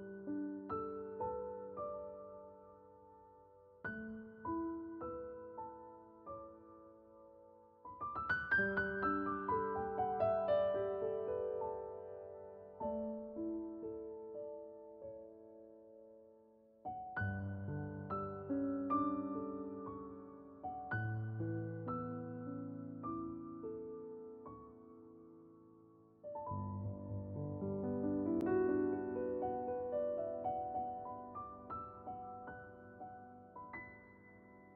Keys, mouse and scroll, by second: 1.8-5.5 drag, 6.0 scroll up 1, 7.0 alt+click, 9.7 alt+right click, 10.7-13.4 drag, 13.4 right click, 13.8 scroll down 1, 14.5 alt+click, 17.1 scroll down 1, 20.1 ctrl+b, 23.4 click, 27.0 alt+right click, 27.6 click, 29.4 shift+click, 31.4 alt+click, 32.0 ctrl+z, 32.1 alt+click, 33.9 scroll down 1, 34.5 right click.